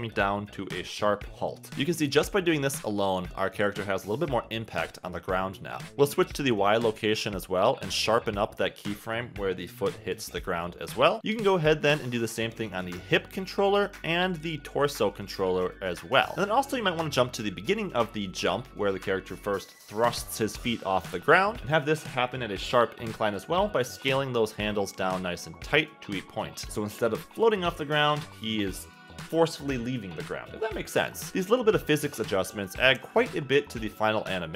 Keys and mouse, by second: 0.8 click, 2.8 space, 3.8 click, 4.4 space, 6.9 click, 7.9 click, 9.9 shift+g, 12.5 shift+g, 15.6 click, 16.0 space, 16.6 click, 18.1 click, 19.8-20.8 drag, 21.6 g, 25.5 shift+click, 26.1 click, 26.7 space, 27.1 space, 27.2 click, 27.8 space, 28.3 space, 28.8 click, 30.1 space, 30.5 space, 31.1 click, 31.4 g, 33.5 click, 34.0 click.